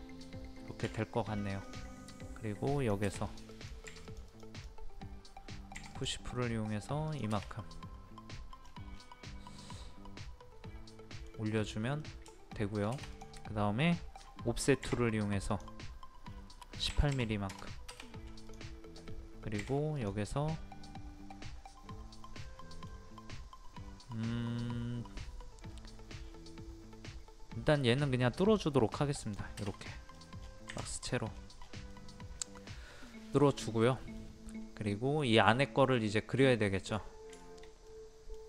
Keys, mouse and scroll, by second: 1.6 click, 5.7 p, 5.9 click, 7.4 middle click, 8.6 scroll down 1, 9.0 scroll up 1, 9.2-11.4 middle drag, 11.4 middle click, 11.5 scroll up 1, 12.0 middle click, 12.7 scroll up 1, 13.1 click, 13.4-14.8 scroll up 1, 14.8 o, 15.5 click, 16.9 KP_1, 18.4 KP_8, 18.4 click, 19.6 p, 19.9 click, 22.4-23.4 middle drag, 29.2 click, 29.8 middle click, 30.1 scroll down 1, 30.7 Escape, 31.0 click, 31.3-31.6 scroll down 1, 31.9 middle click, 33.4 scroll up 1, 33.8 middle click, 34.2 scroll up 1, 34.9 middle click, 37.0 scroll down 1, 37.4 shift+middle click.